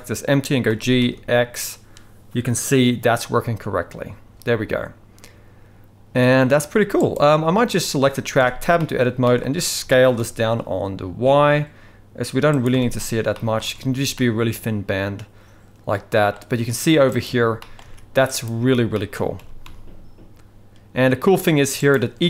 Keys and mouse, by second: 0.7 g, 7.7 click, 8.4 Tab, 8.8 middle click, 9.2 shift+middle click, 9.8 s, 12.7 Tab, 13.4 middle click, 13.8 alt+a, 14.2-16.3 middle drag, 17.2 click, 17.6 middle click, 17.8 alt+a, 18.2 click, 18.9 shift+middle drag, 19.4 g.